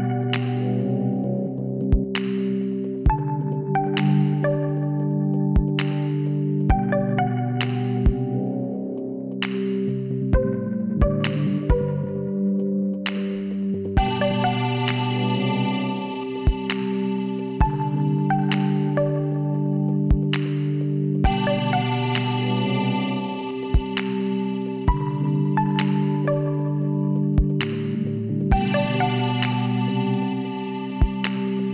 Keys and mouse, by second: 5.3-6.9 middle drag, 6.9-8.1 drag, 8.1-9.7 middle drag, 9.7-11.3 drag, 10.5 w, 14.3 middle click, 16.6 KP_7, 18.2 l, 19.5 r, 24.4 z, 27.8 s, 30.5-31.7 middle drag.